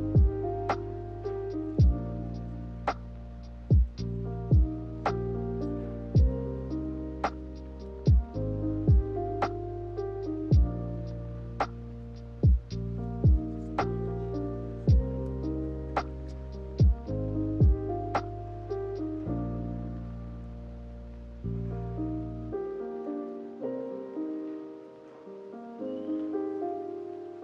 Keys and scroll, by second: 14.2-15.1 typing, 20.5 z, 25.0 k, 26.7 z.